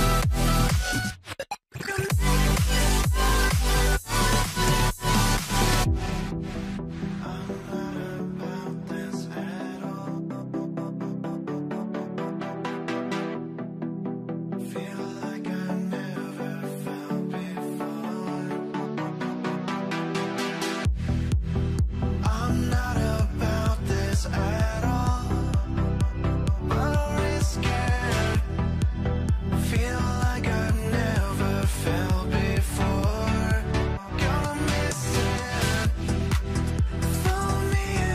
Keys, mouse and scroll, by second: 2.2 scroll down 1, 2.5 middle click, 3.5 scroll, 3.7 scroll up 1, 4.2 middle click, 5.4 double click, 7.3 double click, 11.8 double click, 14.1 scroll down 1, 14.8 alt+middle click, 15.6 alt+middle click, 16.6-18.1 scroll up 1, 19.1 scroll down 1, 19.4 scroll up 1, 21.5 scroll up 1, 24.1-25.6 scroll up 1, 25.6 double click, 31.4 double click, 33.9 5, 34.0 Return, 37.6 middle click.